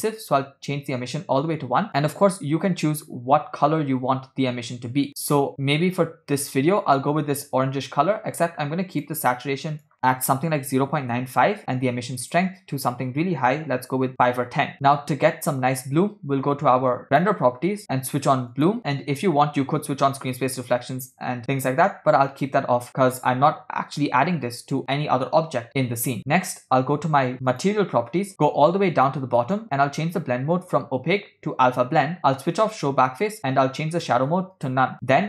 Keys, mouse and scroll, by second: 12.2-14.2 drag, 17.1 click, 18.7 click, 20.3 click, 22.4 click, 27.5 click, 28.3-29.6 drag, 30.6-32.2 drag, 32.8 click, 33.9-34.8 drag.